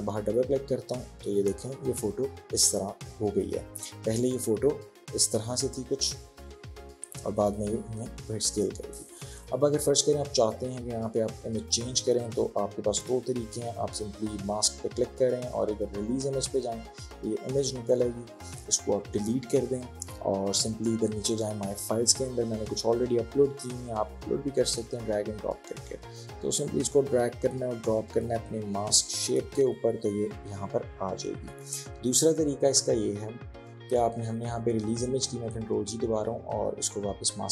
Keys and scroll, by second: 19.0 Delete, 31.7 ctrl+z, 34.8 ctrl+z.